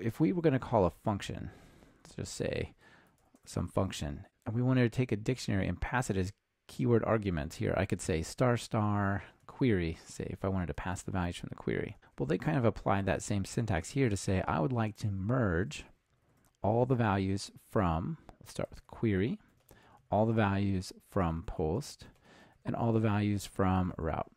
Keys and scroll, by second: 10.0 Return, 16.4 Delete, 21.8 Return.